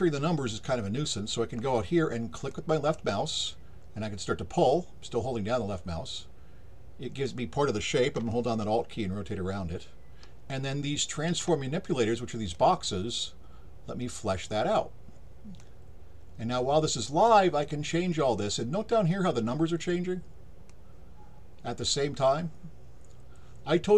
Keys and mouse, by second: 2.5-7.2 drag, 8.3-11.3 alt+drag, 12.5-14.4 drag, 15.6-18.4 drag, 20.7-23.9 drag.